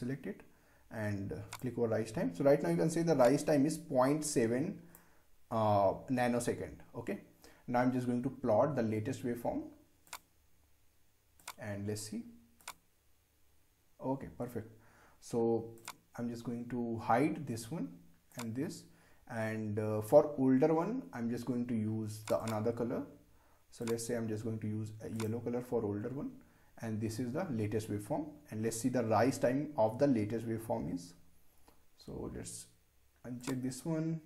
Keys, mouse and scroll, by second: 10.0 click, 15.8 click, 18.3 click, 22.2 click, 33.4 click.